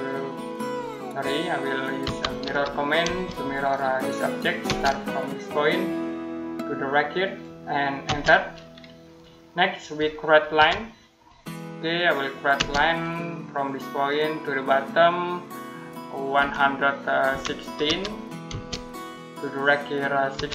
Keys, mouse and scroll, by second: 1.0 Escape, 1.9 m, 2.9 space, 3.4 click, 4.5 space, 5.4 click, 7.9 space, 8.3 middle click, 10.4 l, 12.4 space, 13.5 click, 16.2-18.3 typing, 20.2-20.5 typing.